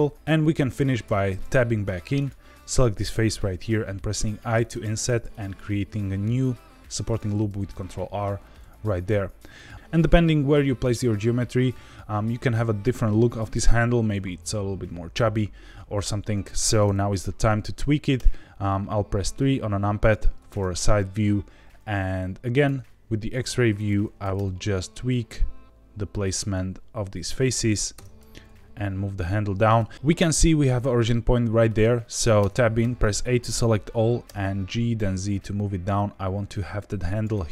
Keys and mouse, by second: 0.1 Tab, 0.1 3, 1.0 Tab, 1.3 middle click, 2.1 click, 3.4 i, 4.6 click, 5.0 ctrl+r, 7.0 click, 8.4-9.7 middle drag, 18.1 KP_3, 22.5 click, 23.4 1, 23.7 click, 24.3 g, 27.1 click, 27.9 Tab, 28.3 g, 28.4 z, 29.6 Escape, 29.9 Tab, 32.3 Tab, 32.8 a, 34.2 g, 34.9 z, 37.1 click.